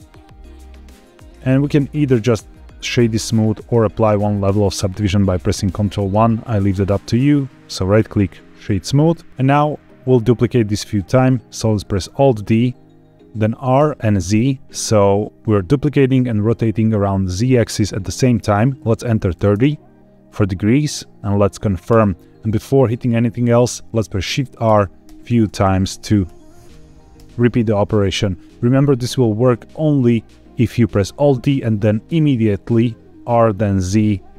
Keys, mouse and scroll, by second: 4.4 ctrl+1, 7.0-7.9 right drag, 9.3 scroll down 1, 9.3-9.7 scroll down 3, 9.8-10.4 shift+middle drag, 12.0 alt+d, 13.7 r, 14.3 z, 19.3 KP_3, 19.5 KP_0, 21.8 KP_Enter, 24.6-27.1 typing.